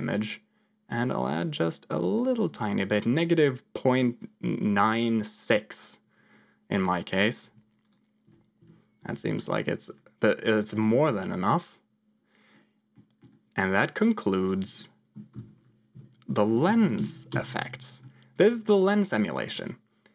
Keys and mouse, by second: 8.2 m, 8.5 m, 8.9 m, 9.2 m, 12.8 middle click, 13.6 click, 15.3 ctrl+j, 15.8 F2, 18.3 click, 18.7 click, 19.0 click.